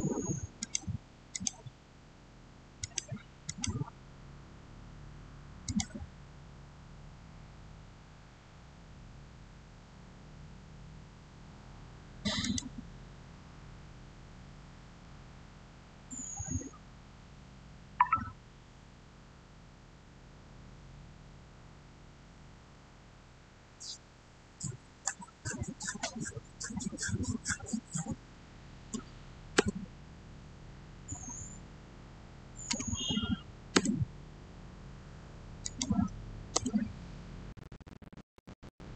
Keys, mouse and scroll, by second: 5.5 click, 6.6 scroll up 1, 12.3 click, 28.9 6, 29.4 Return, 32.6 6, 33.6 Return, 35.5 click, 36.4 Return, 38.2 scroll down 1.